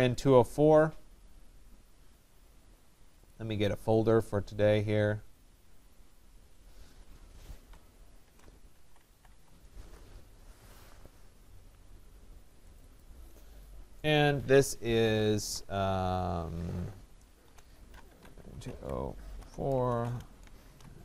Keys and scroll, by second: 9.4 Return.